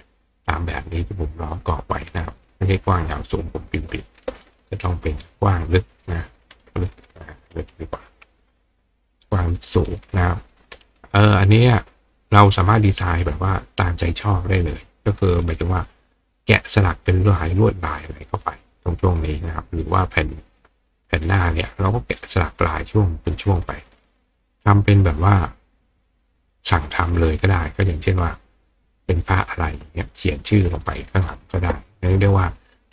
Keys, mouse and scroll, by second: 3.2 click, 5.1 click, 5.9 click, 10.5 click, 10.9 right click.